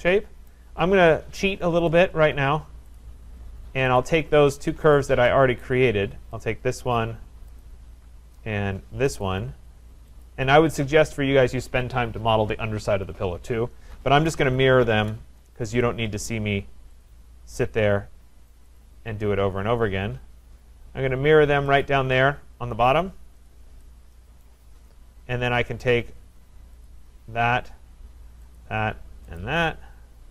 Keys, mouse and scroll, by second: 0.5 right click, 1.9 click, 1.9 scroll, 3.0 click, 4.0 shift+click, 5.0 click, 5.6 right click, 6.5 click, 7.6 click, 9.3 click, 10.3 click, 10.9-14.0 scroll, 13.9-15.3 typing, 17.0 click, 18.6 Return, 18.6 click, 18.8 click, 21.8 shift+click, 22.1 shift+click, 23.5 click, 24.4 right click, 24.7-25.8 scroll down 2, 25.8 scroll down 2, 25.8 click, 26.9 click, 28.6 middle click, 28.6 shift+click, 29.4 click.